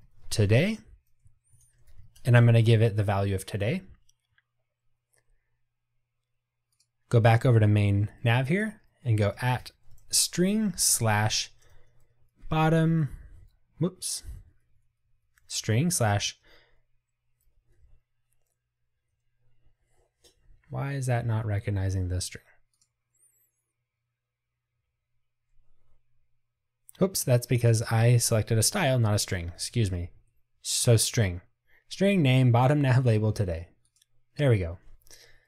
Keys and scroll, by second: 30.2 Escape.